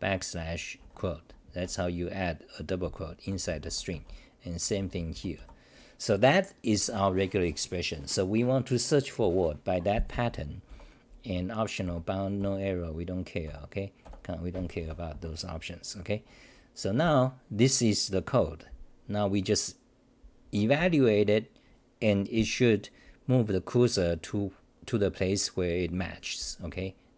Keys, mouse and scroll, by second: 6.4 h, 17.0 y.